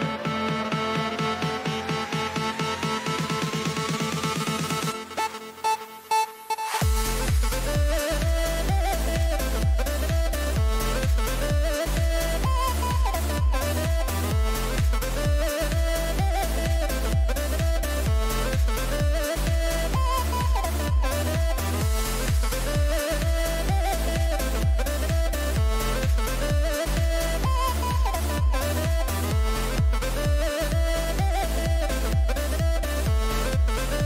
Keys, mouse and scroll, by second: 0.6 a, 2.5 a, 3.0 a, 4.9 n, 5.6-7.5 middle drag, 9.1-13.0 middle drag, 9.6 a, 9.8 a, 13.6-15.4 right drag, 14.2 middle click, 14.9 click, 15.3-20.2 middle drag, 20.8-22.8 right drag, 21.4-26.8 middle drag.